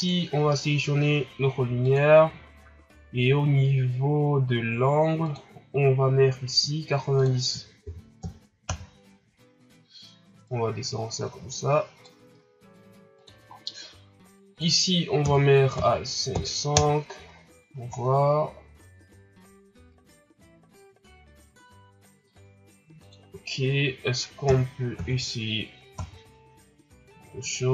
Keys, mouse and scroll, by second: 1.8 click, 3.1-3.5 scroll up 5, 8.6-10.4 drag, 10.4-13.4 drag, 13.6-14.7 scroll up 8, 14.7-17.7 drag, 17.9 shift+scroll down 2, 18.2 scroll up 4, 23.4-25.7 drag, 25.7 KP_0.